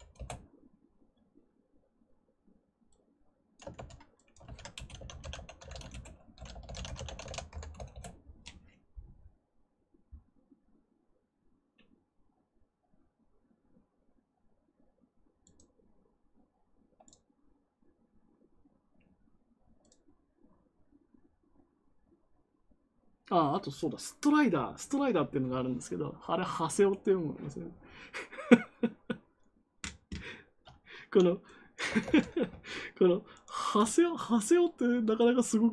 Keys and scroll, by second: 0.1 Return, 3.7 ctrl+c, 4.4 ctrl+v, 4.7-7.5 typing, 7.7 Return, 31.9 ctrl+c.